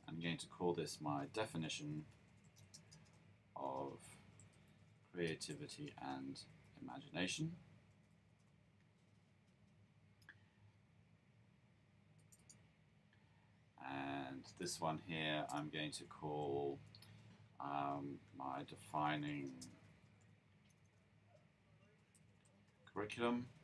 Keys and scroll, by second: 0.9-2.9 typing, 3.9-8.2 typing, 16.2 Up, 16.6 Up, 18.4-20.7 typing, 21.8-22.7 typing.